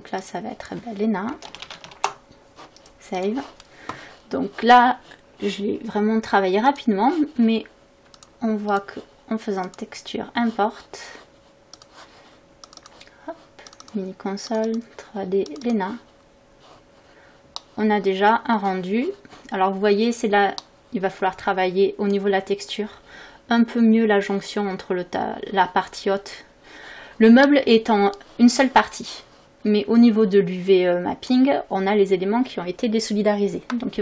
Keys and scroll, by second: 1.4 e, 1.7 n, 1.8 a, 2.0 Return.